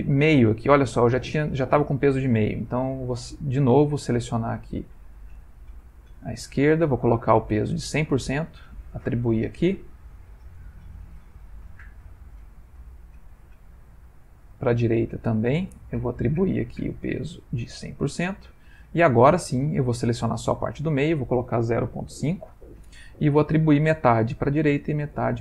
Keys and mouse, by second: 4.5 click, 6.8 click, 7.6 click, 8.9 click, 10.4 click, 12.5 alt+shift+click, 13.7 shift+click, 15.3 shift+click, 16.6 click, 18.1 click, 19.6 alt+click, 20.8 ctrl+click, 21.0 ctrl+click, 24.4 click, 25.2 click.